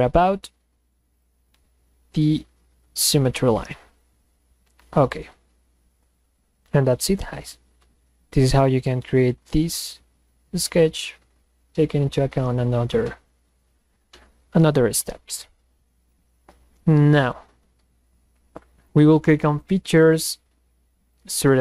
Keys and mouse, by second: 1.2 click, 3.9 click, 19.4 click, 21.1 click.